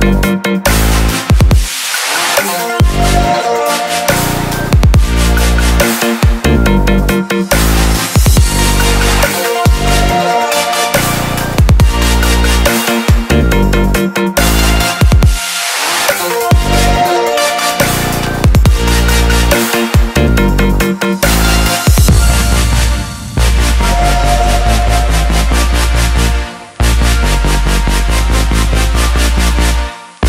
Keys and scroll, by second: 21.9 ctrl+j.